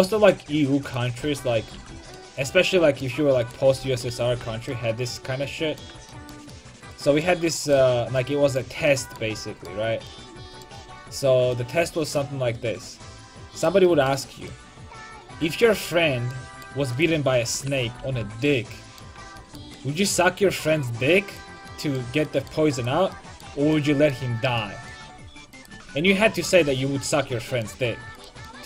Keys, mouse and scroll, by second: 0.9 click, 1.3 ctrl+x, 1.5 a, 1.8 ctrl+t, 2.0 a, 3.9 ctrl+x, 4.1 a, 4.4 ctrl+t, 4.5 a, 9.1 middle click, 10.3 middle click, 10.7 middle click, 17.0 right click, 17.4 ctrl+x, 17.8 a, 18.1 ctrl+t, 18.5 a, 21.3 right click, 22.0-23.7 middle drag, 23.7 right click, 23.8 middle click, 23.9 right click, 24.5 click, 25.6 click, 26.1 ctrl+x, 26.4 a, 26.7 ctrl+t, 26.9 a, 28.2 click.